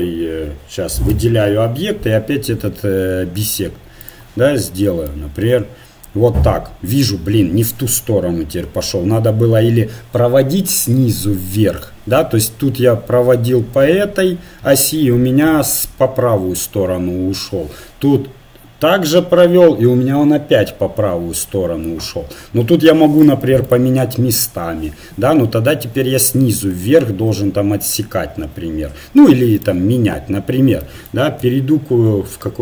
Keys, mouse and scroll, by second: 1.1 a, 4.0-5.9 drag, 23.2-25.6 drag, 29.5-31.5 drag.